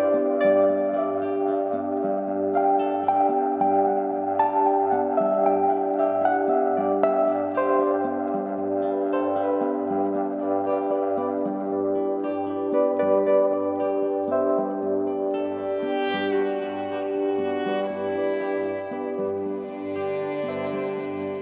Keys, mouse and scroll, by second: 0.3 scroll down 2, 0.4-5.3 drag, 13.9-16.0 drag, 16.0 KP_0, 17.3-19.3 middle drag, 19.3-21.4 drag.